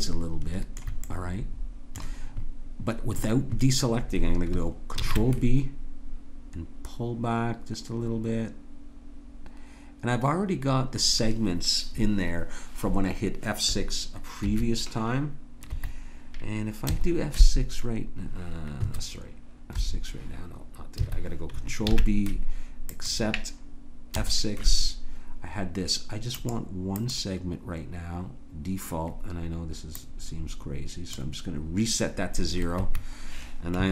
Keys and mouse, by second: 5.0 ctrl+b, 16.9 F6, 19.7 F6, 21.9 ctrl+b, 24.2 F6.